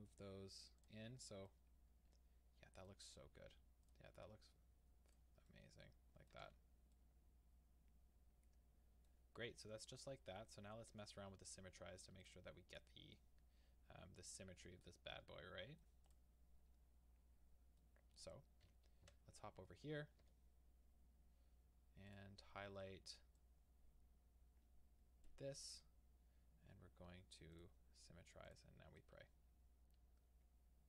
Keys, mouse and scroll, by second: 0.0 middle click, 0.8 click, 1.1 scroll, 1.7 middle click, 2.4 middle click, 3.8 click, 5.5 middle click, 6.5 alt+a, 6.9 middle click, 8.0-9.9 middle drag, 9.9 click, 10.2-10.7 scroll down 2, 10.7 scroll up 2, 10.9 Tab, 12.2 click, 12.7 click, 13.2-16.1 middle drag, 16.1 click, 17.8-22.1 middle drag, 18.7 KP_1, 19.1 KP_3, 19.7-20.2 scroll down 2, 20.2 Tab, 22.1 click, 25.2-29.0 drag, 29.0-30.8 middle drag.